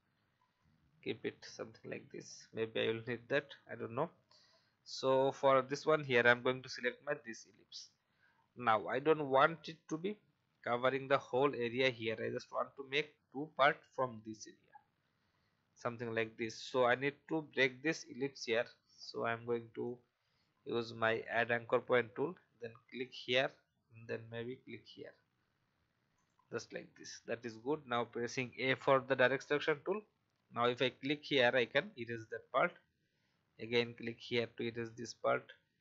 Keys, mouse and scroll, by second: 0.6-2.0 drag, 2.8 alt+scroll up 1, 3.5-4.3 scroll down 1, 6.3 click, 28.3 a, 30.7 click, 31.5 Delete, 33.6 click, 34.3 Delete.